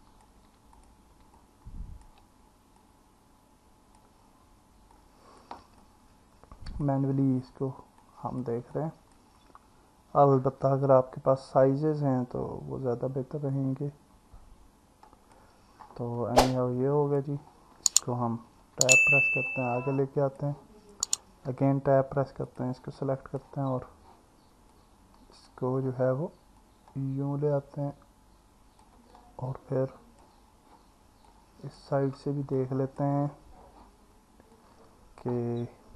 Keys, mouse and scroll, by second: 0.8 click, 1.4 alt+middle click, 2.8 click, 5.0 click, 5.8-6.8 alt+middle drag, 8.1 click, 8.7 alt+middle click, 8.7 scroll down 1, 16.2-17.2 alt+middle drag, 16.2-16.8 alt+scroll down 1, 18.6 Tab, 21.8 Tab, 22.5 click, 23.0 alt+middle click, 24.7 click, 26.6 click, 29.1-30.2 alt+middle drag, 29.1 scroll up 1, 31.3 click, 32.6 alt+middle click, 34.6 click.